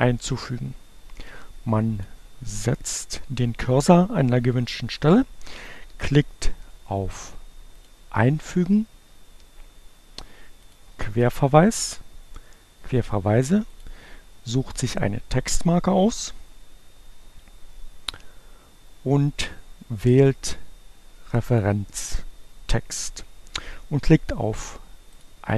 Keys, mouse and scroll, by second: 0.8-2.6 drag, 7.8 click, 10.4 click, 13.4 click, 21.5 click, 25.2 click.